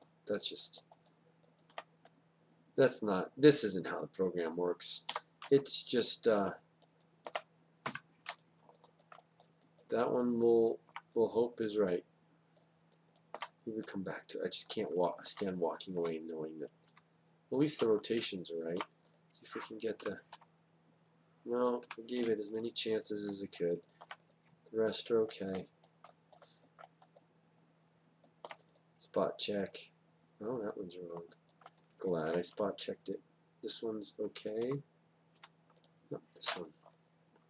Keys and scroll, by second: 6.1 w, 7.0 w, 8.9 F8, 16.9 Down, 21.0 F8, 35.6 Down.